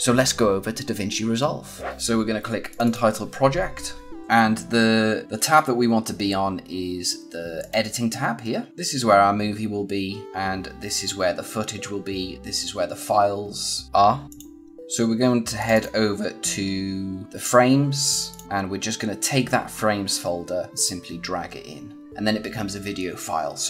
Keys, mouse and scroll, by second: 2.6 click, 5.2 click, 7.5 click, 14.2 click, 15.5 click, 20.1 click.